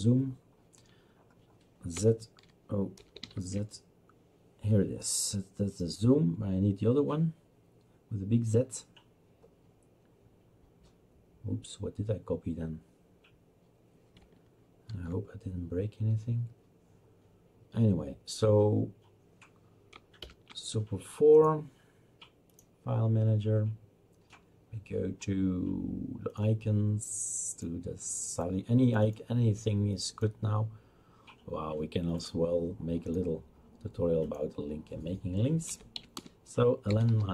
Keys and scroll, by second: 1.7-2.9 typing, 4.5 typing, 14.9 ctrl+z, 20.2 super+4, 35.7-37.3 typing.